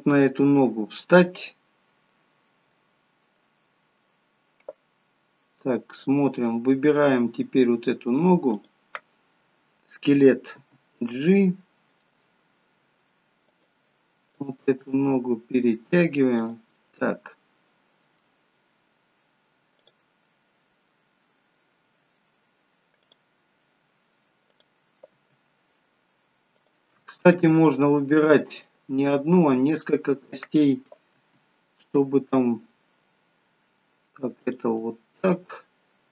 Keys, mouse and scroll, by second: 0.5 middle click, 6.0 click, 6.5 middle click, 8.5 click, 10.6 g, 14.4 click, 14.8 g, 16.8 middle click, 19.7 click, 20.2 middle click, 21.5-22.8 scroll down 3, 23.0 click, 23.4-24.4 scroll up 1, 24.4 scroll up 3, 24.6 click, 25.3 g, 27.6 shift+middle click, 28.7 middle click, 31.1 r, 34.7 middle click.